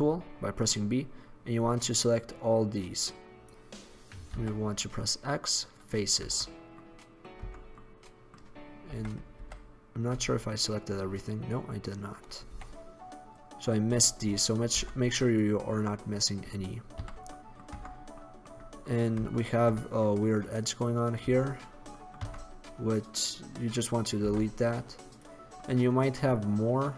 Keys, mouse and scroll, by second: 4.5 x, 6.4 Tab, 7.6 Tab, 9.0 KP_1, 9.5 KP_5, 10.2 KP_5, 12.6 b, 14.9 x, 17.1 z, 17.9 Tab, 20.6 right click, 21.4 Tab, 21.4 click, 22.3 Tab, 23.3-25.3 right drag, 24.4 x.